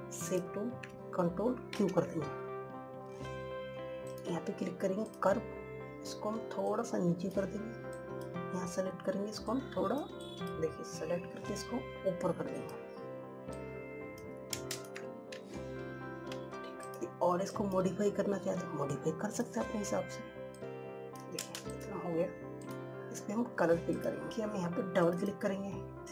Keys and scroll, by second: 2.4 ctrl+q.